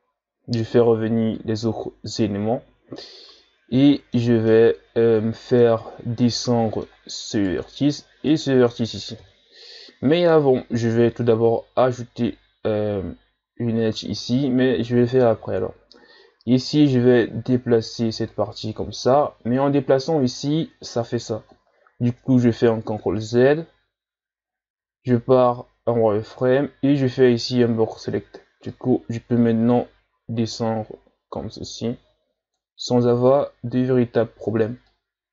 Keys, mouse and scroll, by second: 4.4-7.3 middle drag, 7.3 right click, 8.3 shift+right click, 9.2 KP_3, 16.8-19.8 drag, 22.7 ctrl+z, 24.8 z, 26.2 b, 28.7-31.8 drag, 34.9-35.3 drag.